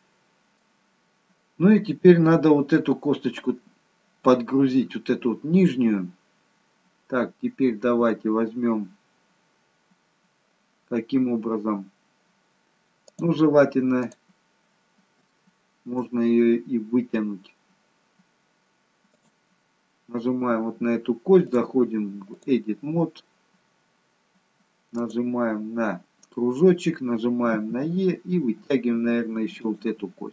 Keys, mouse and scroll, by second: 0.7-2.2 scroll down 1, 3.3-6.3 scroll down 1, 13.0 click, 14.0 click, 15.3 shift+middle click, 16.2 scroll up 2, 19.1 click, 21.5 click, 25.0 click, 27.5 e.